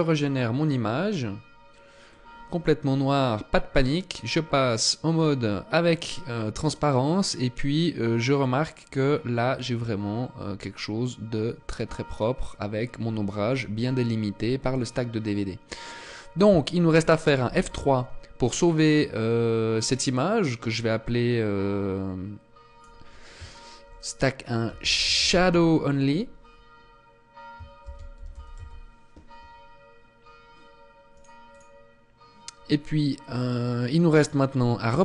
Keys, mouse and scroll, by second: 34.3 click.